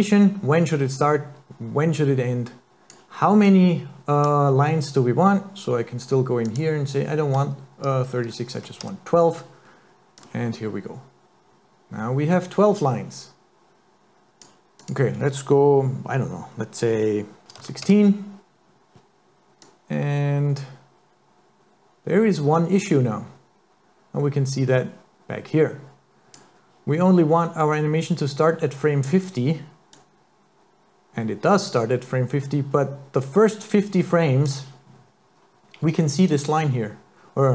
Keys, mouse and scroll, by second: 3.5 click, 6.5 click, 10.2 click, 14.8 click, 19.7 click, 29.9 click.